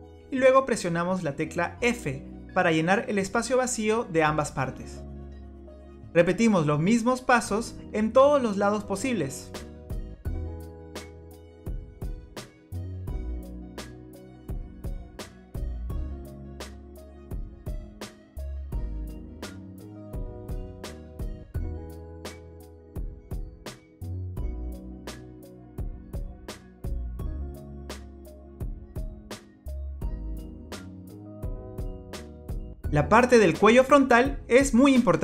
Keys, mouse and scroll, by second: 2.5 f, 4.1 click, 6.0 shift+click, 9.7 f, 10.1 click, 10.3 shift+click, 10.6 shift+click, 11.0 f, 11.2 click, 11.5 scroll down 1, 11.6 middle click, 12.2 click, 12.4 shift+click, 13.0 f, 13.1 click, 13.3 middle click, 13.6 scroll down 4, 13.7 middle click, 15.2 scroll up 4, 15.8 click, 16.0 shift+click, 16.7 f, 17.0 click, 17.2 shift+click, 17.8 f, 18.1 click, 18.4 shift+click, 18.7 shift+click, 18.8 f, 19.0 click, 19.2 shift+click, 19.4 click, 19.9 f, 19.9 click, 20.0 scroll down 2, 20.1 click, 20.3 middle click, 21.4-21.7 scroll up 2, 21.5 middle click, 22.7 shift+click, 23.3 f, 23.6 click, 23.9 shift+click, 24.2 scroll up 2, 24.3 scroll down 1, 24.4 scroll down 1, 24.4 middle click, 25.0 shift+click, 25.6 f, 25.9 click, 26.1 shift+click, 26.8 f, 27.2 middle click, 27.5 scroll up 2, 27.8 click, 28.1 shift+click, 28.3 shift+click, 28.9 f, 29.3 middle click, 29.3 scroll down 2, 30.0-30.9 scroll up 7, 31.1 middle click, 31.1 scroll down 4, 31.2 middle click, 31.8 click, 32.2 shift+click.